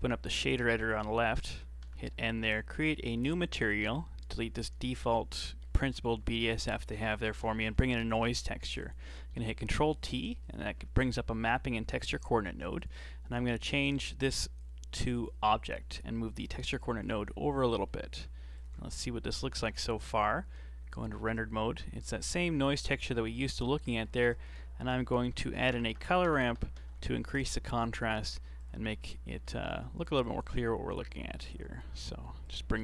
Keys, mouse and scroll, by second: 1.8 n, 2.8 click, 3.3 scroll up 3, 3.5-4.2 middle drag, 4.2 right click, 4.5 x, 4.7-6.2 middle drag, 6.2 shift+a, 9.3 ctrl+t, 9.7-12.1 middle drag, 12.1 click, 13.3 scroll up 4, 13.6-14.6 middle drag, 14.6-15.7 drag, 16.4 g, 17.3-17.6 scroll down 4, 17.6 middle click, 18.5 ctrl+shift+click, 18.9-19.3 scroll up 4, 19.6 KP_7, 20.1 z, 21.0-21.5 scroll up 6, 22.1-22.5 scroll down 2, 22.5-23.1 scroll up 8, 23.1 middle click, 23.5 scroll down 4, 23.9 middle click, 24.1 shift+a, 25.8 BackSpace, 27.0 r, 29.0 scroll up 4, 29.3 middle click, 30.2-32.8 drag.